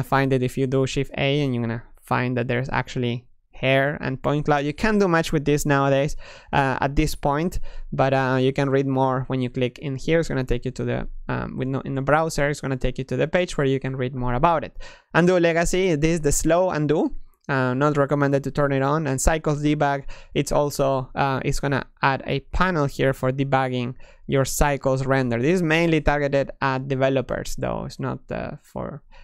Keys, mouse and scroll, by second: 0.6 a, 0.8 a, 2.1 shift+a, 6.3 shift+a, 22.2 click, 23.8-25.5 drag, 25.5-29.2 middle drag.